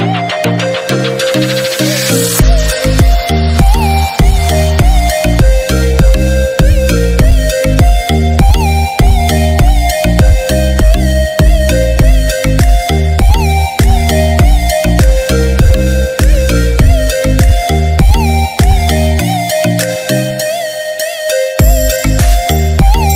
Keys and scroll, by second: 3.0 ctrl+j, 5.5 ctrl+z, 11.2 ctrl+z, 18.9 ctrl+j.